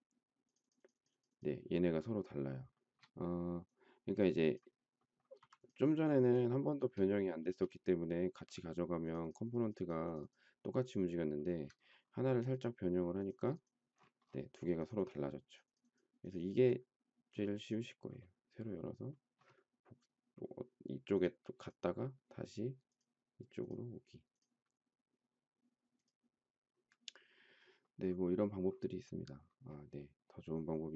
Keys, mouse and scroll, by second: 2.7 shift+middle click, 5.3 m, 6.6 shift+middle click, 6.7 shift+double middle click, 7.4 space, 11.3 shift+middle click.